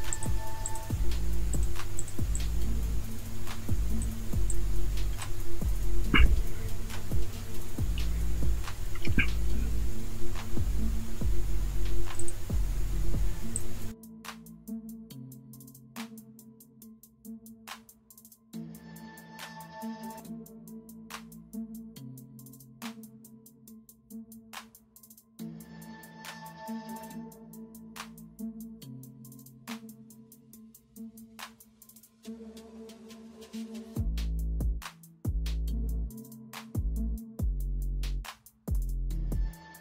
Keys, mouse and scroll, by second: 4.3 space, 9.0 alt+scroll up 1, 14.2 alt+click, 14.3 alt+scroll up 1, 15.0 alt+click, 15.7 alt+click, 16.3 space, 17.4 alt+click, 19.5 alt+scroll up 1, 20.2 alt+click, 21.7 alt+click, 22.9 alt+click, 23.7-24.0 alt+scroll down 1, 24.4-25.2 alt+scroll up 1, 25.2 space, 25.3 alt+scroll up 1, 26.1 alt+click, 27.1 alt+scroll up 1, 28.1 alt+click, 28.7 alt+click, 29.4 alt+click, 30.3 alt+click, 30.4-30.8 alt+scroll down 1, 31.6 alt+click, 32.1 alt+click, 32.7 alt+scroll up 1, 33.2 alt+click, 34.4-34.8 alt+scroll up 1, 36.9-37.3 alt+scroll down 1, 37.3 alt+scroll up 1, 37.7-38.1 alt+scroll down 1, 38.3 alt+scroll up 1, 38.9 alt+click.